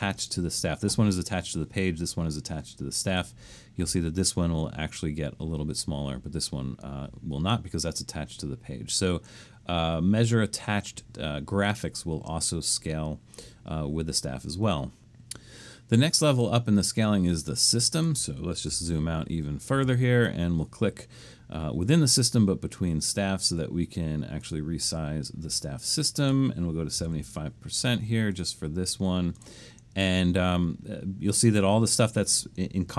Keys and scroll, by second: 18.8 super+-, 19.2 super+-, 19.7 super+-, 26.7-27.5 typing.